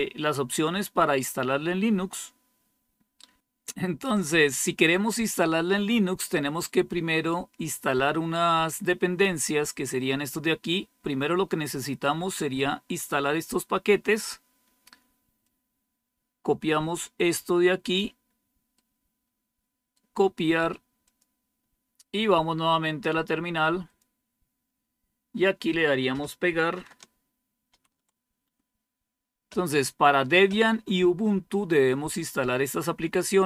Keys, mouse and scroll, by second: 0.4-1.8 scroll down 3, 1.8-4.0 scroll down 4, 15.3-17.9 drag, 18.7-19.8 right drag, 20.9 click, 23.7 click, 25.3 click, 27.6 ctrl+v.